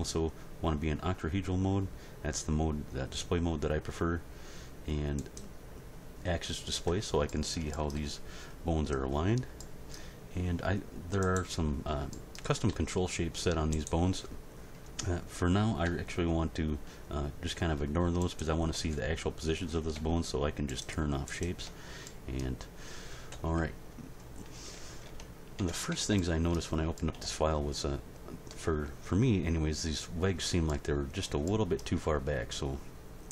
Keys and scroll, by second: 12.7 r, 23.3 End, 23.6 Page_Down, 25.0 Tab.